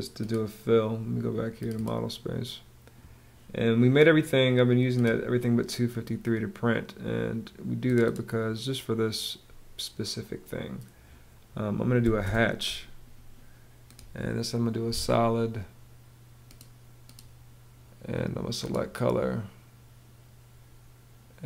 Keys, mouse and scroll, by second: 11.5 h, 11.7 space.